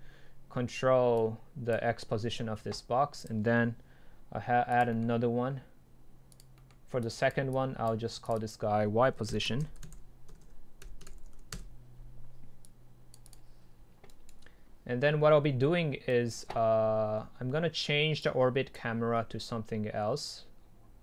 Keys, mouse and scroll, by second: 1.2-5.0 drag, 6.4-6.8 drag, 7.0-10.2 drag, 10.2 Delete, 11.6 Return, 12.7-13.6 drag, 14.1-18.2 right drag, 18.2 click.